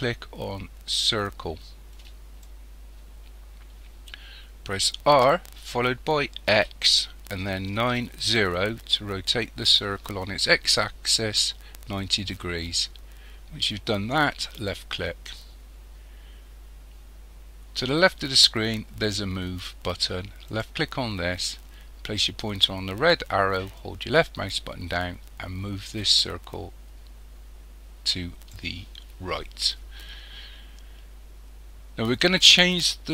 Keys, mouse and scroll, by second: 5.1 r, 20.5 click, 23.8 click.